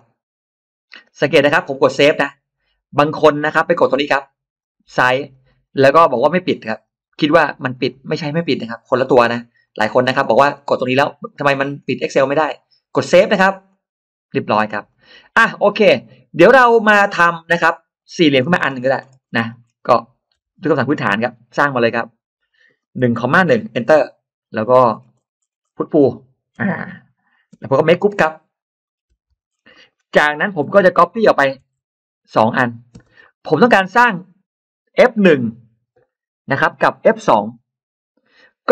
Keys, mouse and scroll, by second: 1.3 click, 2.4 click, 3.4 click, 4.4 click, 4.6 click, 4.8 click, 5.0 click, 5.1 click, 5.3 click, 5.5 click, 5.6 click, 5.8 click, 6.0 click, 6.1 click, 6.3 click, 6.5 click, 6.7 click, 6.9 click, 7.0 click, 7.2 click, 7.4 click, 7.6 click, 7.7 click, 8.1 click, 8.3 click, 8.5 click, 8.9 click, 9.5 click, 9.7 click, 9.9 click, 10.0 click, 10.2 click, 10.4 click, 10.5 click, 10.7 click, 10.9 click, 11.1 click, 11.3 click, 11.5 click, 11.6 click, 11.8 click, 12.0 click, 12.2 click, 13.5 click, 14.7 click, 17.5 middle click, 17.9-18.7 scroll down 2, 18.8 scroll up 1, 18.9-19.6 scroll down 2, 20.2 r, 20.3-20.7 scroll up 1, 21.0 click, 22.9 1, 23.4 1, 23.7 Return, 24.4-26.2 scroll up 3, 26.4 p, 26.5 click, 27.2 click, 27.3 space, 27.5 click, 27.7 click, 27.8 click, 28.7 scroll down 1, 29.0 g, 29.6 middle click, 29.6-30.0 scroll down 3, 30.4 scroll up 2, 30.5 m, 31.2 click, 31.5-31.8 ctrl+scroll down 3, 32.4 click, 32.8 click, 32.8 space, 33.0-33.8 scroll up 2.